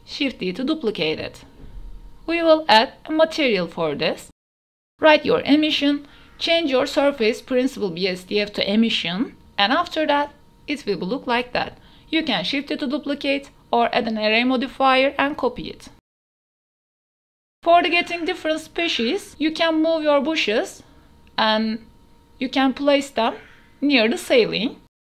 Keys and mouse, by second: 0.0-0.1 typing, 1.0 click, 2.9 ctrl+j, 3.0 click, 3.5-5.4 drag, 4.8 s, 6.6 ctrl+s, 7.1-8.4 drag, 10.8 a, 11.6 a, 16.6 shift+d, 17.0 x, 18.0 click, 19.0 r, 19.4 y, 21.0 g, 21.1 z, 22.0 drag, 22.2 KP_Decimal, 22.4 click, 22.7 g, 22.8 z, 23.1 shift+middle click, 23.4 shift+middle click, 23.9-25.0 typing.